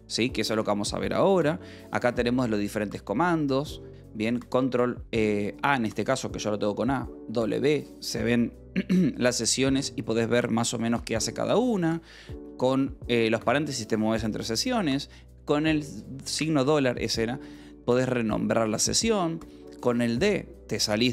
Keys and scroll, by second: 1.5 ).